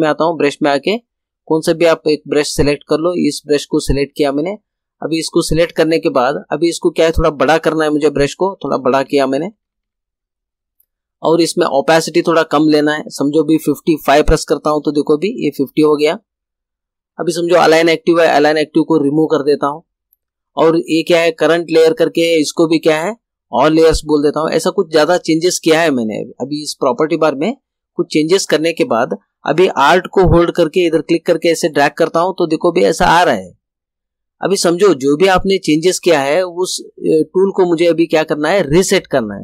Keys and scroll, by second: 8.6 ], 15.0 5.